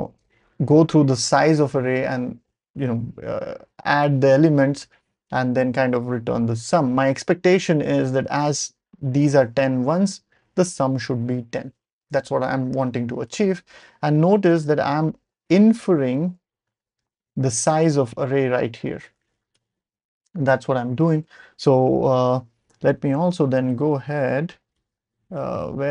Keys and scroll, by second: 13.3 ctrl+alt+super+p, 14.0 ctrl+alt+super+p, 19.5 BackSpace, 23.5 Up, 23.7 Up, 23.9 Up, 24.0 Up, 24.1 Up, 24.2 Up, 24.3 Up, 24.4 Up, 24.7 Down, 25.0 Up, 25.3-25.9 typing.